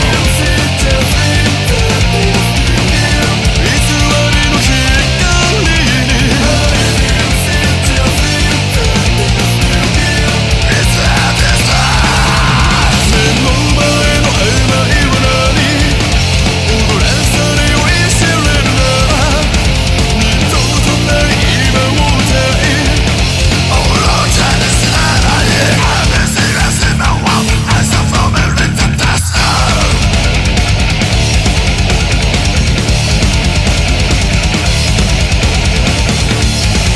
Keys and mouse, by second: 0.0 ctrl+z, 0.4 ctrl+z, 0.6 ctrl+z, 1.3 ctrl+z, 1.7 ctrl+z, 6.4 ctrl+z, 7.8 ctrl+z, 9.3 ctrl+z, 36.1 ctrl+z.